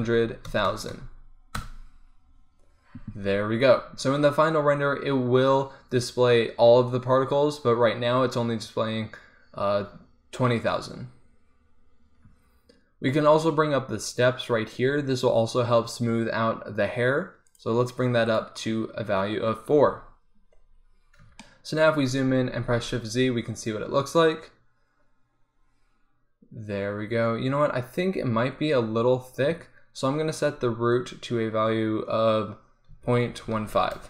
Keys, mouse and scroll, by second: 0.1 KP_0, 0.7 KP_0, 7.9-13.3 middle drag, 17.5-20.7 drag, 20.7 middle click, 23.0 shift+z, 29.3-32.9 drag.